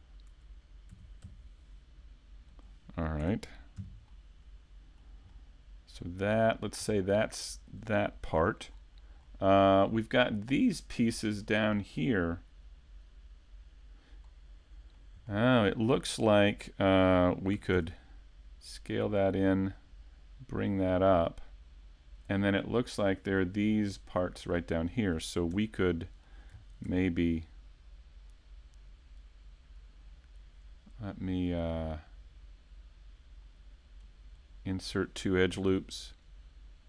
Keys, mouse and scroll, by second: 3.8 KP_5, 4.1 middle click, 5.3 middle click, 6.8-7.6 scroll down 2, 7.2 middle click, 9.3 middle click, 9.3 scroll up 1, 11.1 middle click, 11.1-11.7 scroll up 1, 11.7-12.1 scroll up 2, 14.2 middle click, 15.3 shift+middle click, 15.8 scroll up 1, 16.4-17.0 scroll up 1, 17.5 scroll up 1, 19.1 click, 19.8 click, 23.0 middle click, 24.5 middle click, 25.6 Tab, 25.9 middle click, 26.9 ctrl+r, 34.5 click, 35.5 click.